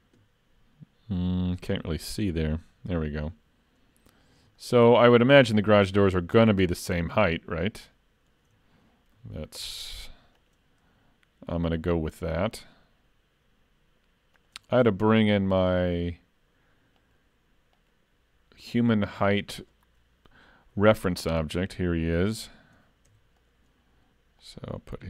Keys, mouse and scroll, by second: 1.2 z, 4.6 shift+middle click, 9.6 ctrl+r, 17.0 click, 17.8 click, 19.2 click, 23.1 Tab, 23.4 click, 24.5 click.